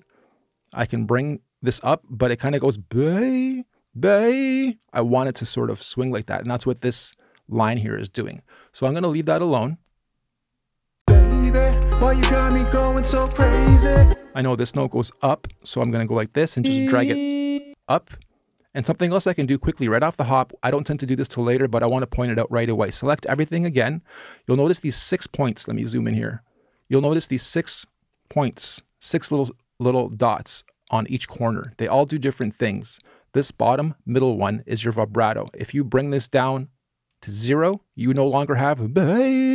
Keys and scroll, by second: 10.8 space, 13.8 space, 23.1 super+a.